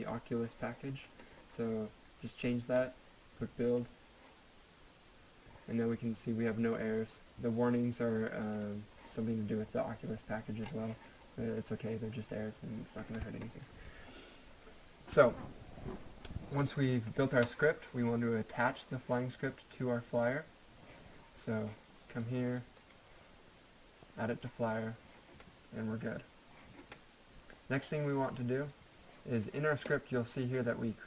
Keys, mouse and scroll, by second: 2.8 click, 8.5 click, 10.0 scroll down 1, 10.6 scroll up 1, 13.8 click, 20.1 click, 20.3 click, 28.6 click.